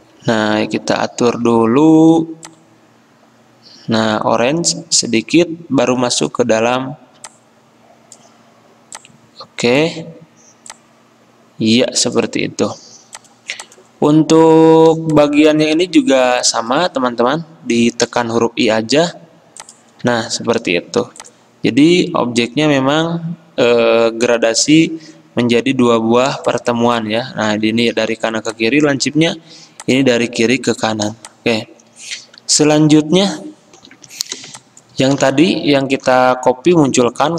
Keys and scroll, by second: 0.1 F10, 1.5 g, 15.1 ctrl+z, 22.3 i, 22.3 v, 27.6 ctrl+z, 29.2 ctrl+z, 33.9 F10.